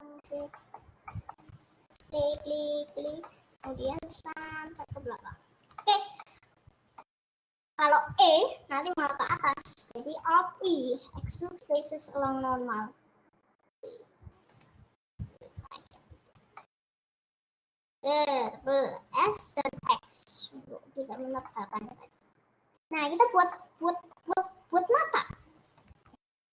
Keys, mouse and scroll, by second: 0.4 shift+click, 1.1 middle click, 2.0 shift+click, 2.4 shift+click, 3.0 shift+click, 3.5 middle click, 4.2 shift+click, 4.9 shift+click, 6.1 middle click, 6.3 scroll down 2, 6.4 middle click, 7.3 scroll up 2, 7.4 middle click, 8.0 e, 9.4 ctrl+z, 12.8 alt+e, 16.0 click, 16.8-19.3 middle drag, 19.3 s, 21.6 middle click, 21.8-23.5 scroll up 3, 23.5-24.5 middle drag, 24.5-25.9 scroll up 1, 25.9 click.